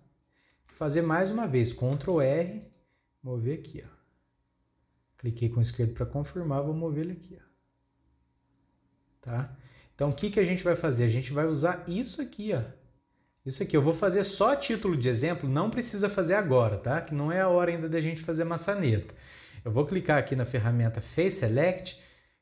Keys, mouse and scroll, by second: 1.9 ctrl+r, 10.2 alt+a, 10.9 scroll up 5, 14.1-17.6 scroll down 4, 21.2-22.4 drag.